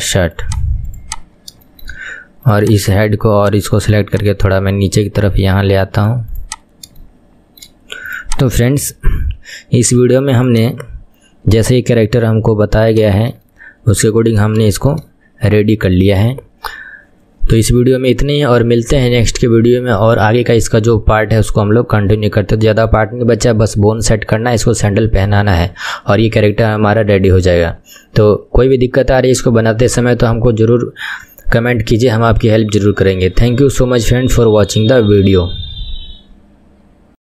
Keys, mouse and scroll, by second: 0.5 click, 1.5 middle click, 1.5-1.9 scroll down 1, 1.9 shift+middle click, 2.7 click, 6.6 click, 7.2-8.4 shift+middle drag, 8.4 click, 9.0 s, 13.0 s, 13.2-13.6 scroll up 4, 13.6-14.3 shift+middle drag, 14.3-15.2 scroll down 4, 15.3-20.1 shift+middle drag.